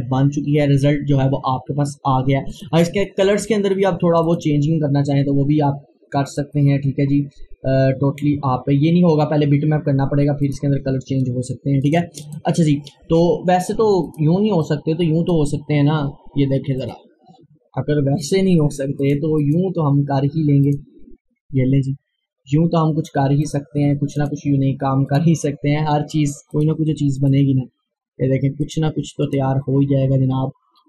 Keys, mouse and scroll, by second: 2.5 click, 2.7 click, 10.4 click, 10.6 click, 11.3 scroll down 1, 11.9 click, 12.7-13.6 scroll up 1, 14.1-16.8 drag, 21.9 scroll up 1, 23.5 click.